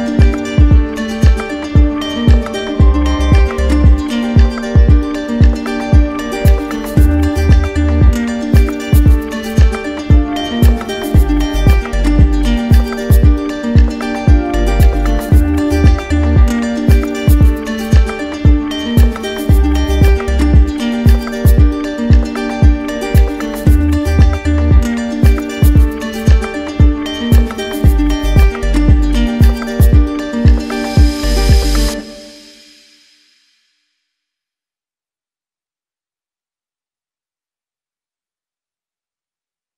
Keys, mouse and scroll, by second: 0.9 click, 3.7 click, 4.3 click, 4.8 click, 5.4 alt+click, 6.4 alt+click, 8.9-10.0 right drag, 11.3-12.3 drag, 17.3 click, 18.5 click, 18.6 ctrl+z, 20.8-21.9 drag, 21.5 ctrl+z, 22.5 click, 23.0 alt+click, 23.4 alt+click, 25.7 click, 26.8 click, 35.3-36.3 drag, 37.1 click, 38.6 click, 39.5 click.